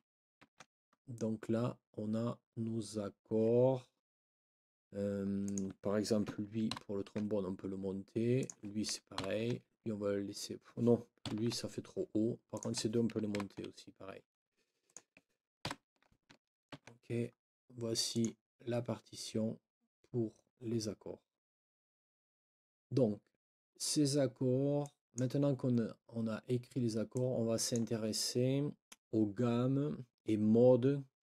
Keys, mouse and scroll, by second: 0.4 ctrl+s, 5.4 click, 6.7 ctrl+Up, 8.4 ctrl+click, 9.1 ctrl+Up, 11.3 ctrl+Down, 12.5 ctrl+click, 13.3 ctrl+Up, 14.9 click, 15.6 ctrl+Up, 16.7 ctrl+s, 18.1 click, 24.8 click, 27.1 click.